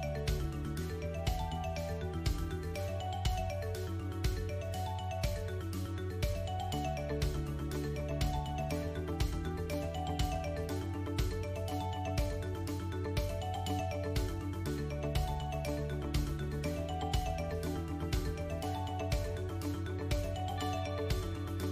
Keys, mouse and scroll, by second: 0.0 scroll up 2, 0.4 shift+middle click, 0.8 middle click, 1.3-1.9 scroll up 2, 1.9-2.5 scroll down 3, 2.3 middle click, 3.6 2, 4.4 click, 4.8 middle click, 6.2 shift+click, 6.7 middle click, 8.4 shift+click, 8.8 middle click, 10.0 shift+click, 10.7 KP_7, 11.3-12.2 scroll down 1, 12.2-12.7 scroll down 1, 12.9 ctrl+b, 16.7 click, 16.9-21.6 typing.